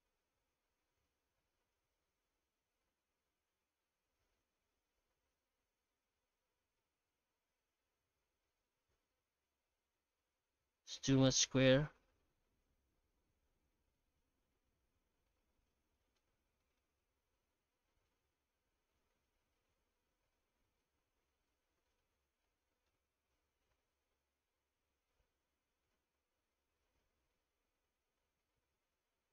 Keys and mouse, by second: 8.5-10.5 middle drag, 11.9 F9, 14.9-16.1 middle drag, 16.6 middle click, 16.8 F9, 21.4-21.8 middle drag, 22.5 middle click, 23.2 F9.